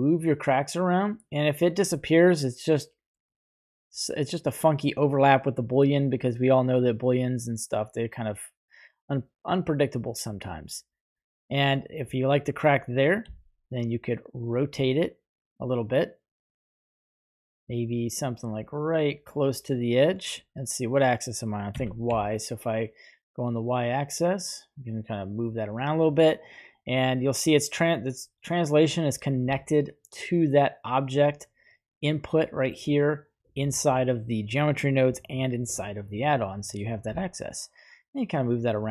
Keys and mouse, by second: 13.1 r, 21.6 g, 22.1 y, 25.4 click, 31.1-33.3 right drag, 36.2 right click, 37.2 g.